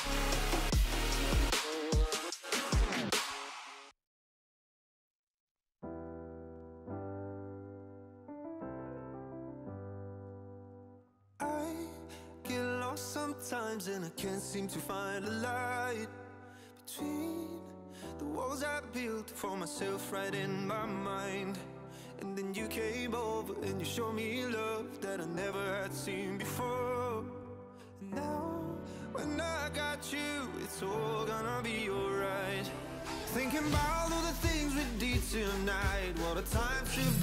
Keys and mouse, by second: 2.9 Down, 3.3 Up, 4.5 click, 6.1 click, 7.0 click, 7.4 click, 8.3 click, 10.1 click, 10.6 click, 13.8 click, 14.5 click, 14.8 space, 15.1 click, 16.1 click, 18.3 click, 18.5 click, 19.6 space, 19.7 click, 21.7 space, 21.8 click, 22.0 click, 22.9 click, 23.2 click, 24.3 click, 25.4 click, 26.1 click, 28.5 ctrl+], 30.1 ctrl+], 30.7 ctrl+[, 31.7 click, 32.8 shift+click, 33.3 alt+shift+click, 33.8 click, 35.2 click, 35.8 click, 36.4 ctrl+[.